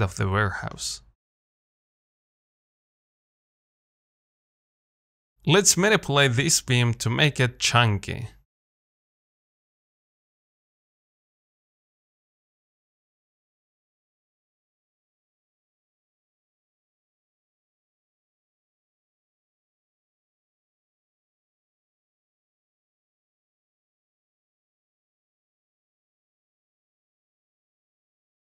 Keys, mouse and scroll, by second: 2.0 z, 2.2 middle click, 2.8-3.1 scroll up 3, 3.1-6.1 middle drag, 6.2 scroll up 1, 6.5 shift+middle click, 6.7 Tab, 8.2 1, 8.5 middle click, 9.3 click, 9.6 g, 11.7 middle click, 12.2 Tab, 12.6 middle click, 13.2 scroll up 2, 13.7-14.4 scroll down 2, 14.4 shift+middle click, 15.2 click, 15.3 Tab, 15.7 Tab, 16.1 click, 16.2 Tab, 16.9 click, 17.3 g, 18.4 Tab, 18.6-18.9 scroll down 1, 18.9-20.0 middle drag, 20.0-20.4 scroll up 1, 20.4 Tab, 21.5 g, 22.4 Tab, 22.9-23.3 scroll down 3, 23.3 middle click, 23.6-24.0 scroll up 1, 24.0-28.5 shift+middle drag.